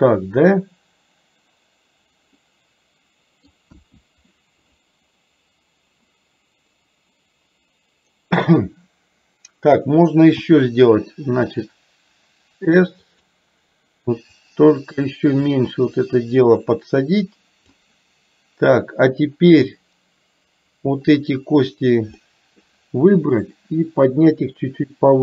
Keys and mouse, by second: 2.5-3.6 middle drag, 3.8 KP_1, 14.5-17.9 drag, 19.9-21.3 drag, 22.3 middle click, 23.6-25.2 drag.